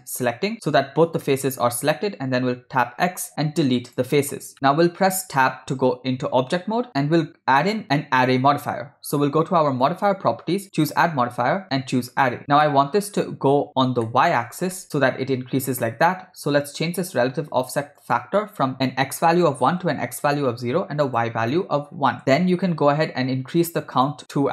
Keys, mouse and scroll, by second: 0.2 shift+click, 0.8 scroll down 1, 1.3-2.5 middle drag, 3.1 x, 5.3 Tab, 7.6 middle drag, 9.9 click, 10.8-12.4 drag, 12.7-13.1 middle drag, 14.0-14.6 shift+middle drag, 14.8 ctrl+middle click, 18.0-20.0 drag, 21.1-22.2 drag, 23.6 click, 23.9 click, 24.4-24.5 shift+middle drag.